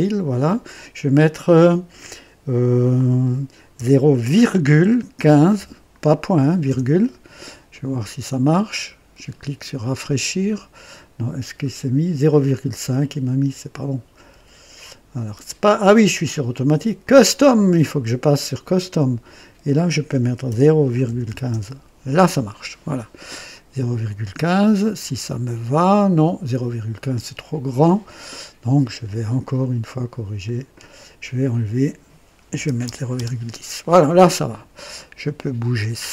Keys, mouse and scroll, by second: 3.7 KP_0, 5.2 KP_1, 5.5 KP_5, 6.6 KP_Enter, 7.0 typing, 8.6 click, 12.2 click, 14.2 ,, 15.4 click, 16.1 click, 16.9 click, 19.2 click, 20.4-21.5 typing, 21.4 KP_Enter, 24.9-26.3 drag, 29.4 click, 30.4 click, 31.1 click, 32.5 BackSpace, 32.8 KP_0, 33.1 Return, 33.2 Return, 35.7-36.1 drag.